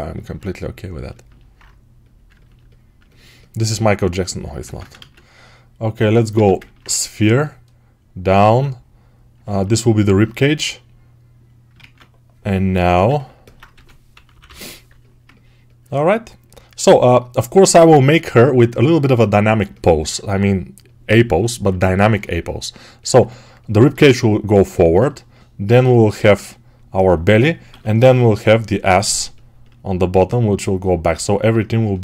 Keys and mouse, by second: 4.5 ctrl+Tab, 4.8 shift+a, 6.2 Tab, 11.6 ctrl+Tab, 12.9-21.9 ctrl+alt+drag, 13.6 g, 14.0 ], 14.2 ], 21.9-32.0 ctrl+alt+right drag, 27.6 6, 29.0 g.